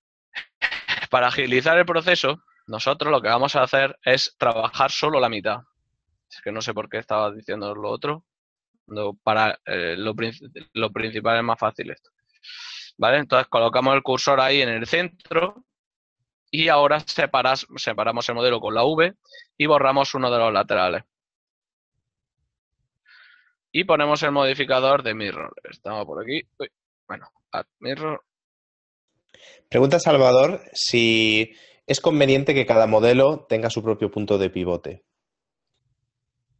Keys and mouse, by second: 1.1 click, 4.0 z, 5.5 right click, 6.1 shift+right click, 6.8 shift+s, 7.4 click, 9.7 Tab, 10.9 click, 12.8 click, 14.7 right click, 14.9 Tab, 16.1 click, 17.5 right click, 18.3 v, 19.4 right click, 20.6 right click, 20.7 typing, 22.9 click, 23.8 click, 27.1 space, 28.6 d, 28.8 space, 29.3 o, 30.7 Down, 30.9 Up, 31.4 Return, 32.0 Down, 34.2 Return, 36.1 click.